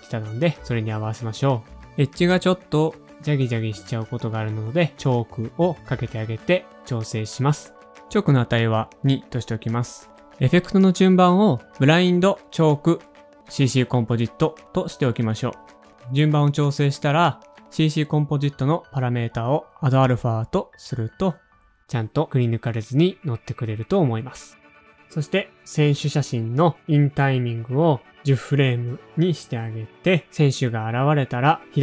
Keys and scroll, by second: 2.2-3.5 typing, 5.3-6.8 typing, 8.5 2, 10.4 2, 14.5 super+z, 17.9 typing, 28.2 alt+/, 29.7 [, 31.1 shift+Page_Up, 31.1 space, 31.3 shift+Page_Up, 31.5 Page_Down.